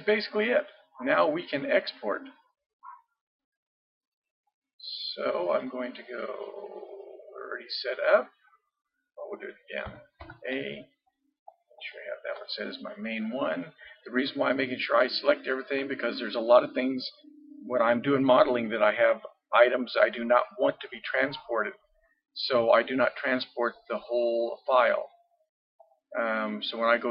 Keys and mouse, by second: 1.3 middle click, 5.5-7.3 drag, 9.9 a, 10.2 a, 25.8-27.1 drag.